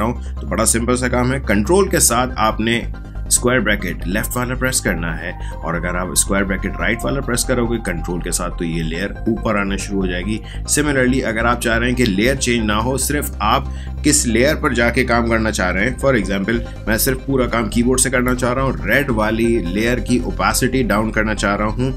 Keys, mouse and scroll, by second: 2.6 ctrl+[, 6.6 ctrl+].